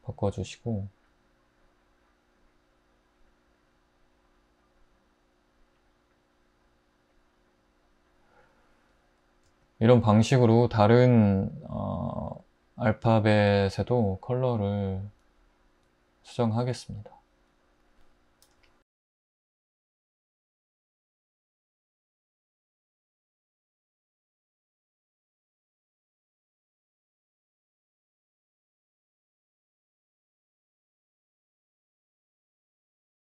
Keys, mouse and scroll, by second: 16.6 Tab, 20.9 Tab, 25.4 Tab, 26.1 i, 27.5 Tab, 29.9 scroll, 30.0 typing, 30.5 Tab, 31.2 |, 32.4 Tab.